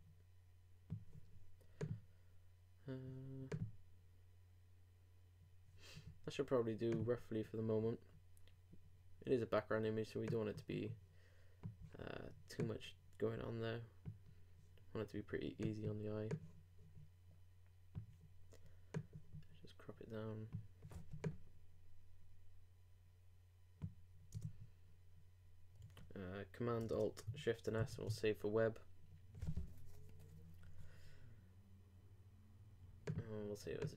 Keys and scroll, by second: 27.8 alt+shift+super+s.